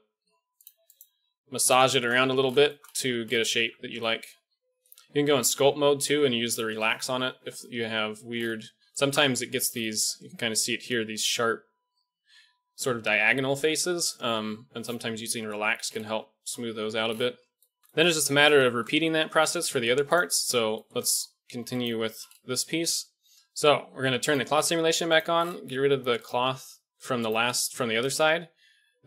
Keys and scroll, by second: 1.1 g, 3.6 Tab, 5.3 KP_1, 16.5 KP_1, 17.8 shift+a, 21.4 g, 23.3 ctrl+z, 23.3 a.